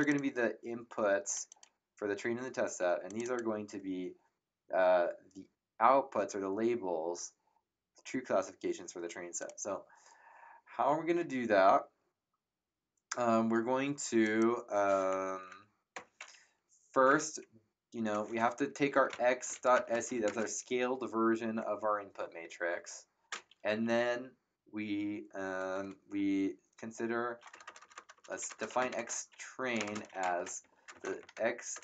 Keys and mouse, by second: 0.0 click, 1.5 click, 3.1 click, 9.4 click, 14.2 click, 15.3 Return, 15.3 KP_Enter, 15.4 Up, 15.9 Return, 15.9 KP_Enter, 18.6-20.2 typing, 27.5-31.8 typing.